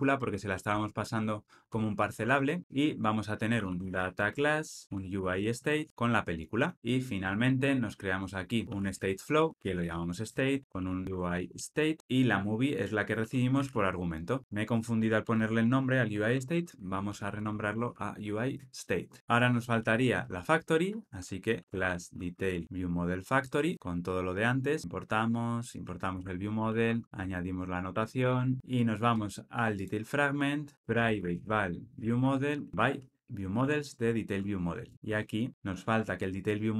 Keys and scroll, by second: 0.7 Return, 4.8 Tab, 6.6 Tab, 9.5 Return, 11.0 super+z, 12.0 alt+Return, 14.4 Return, 16.1 Return, 23.7 Tab, 24.8 alt+Return, 33.5 Tab, 34.8 alt+Return, 35.7 super+b.